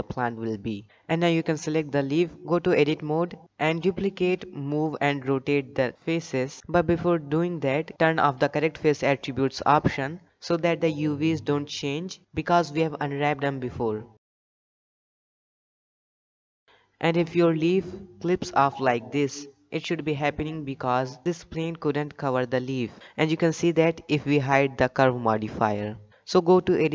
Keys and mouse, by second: 2.7 click, 3.8 Tab, 4.9 alt+a, 5.3 shift+middle click, 7.0 l, 11.4-12.4 drag, 14.3 shift+middle click, 15.0 shift+d, 18.2 Tab, 22.5 click, 23.6-24.0 shift+middle drag, 26.6 Tab.